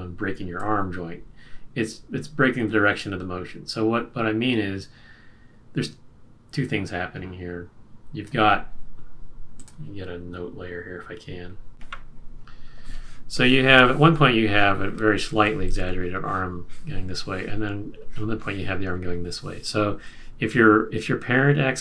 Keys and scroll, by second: 15.3 super+z.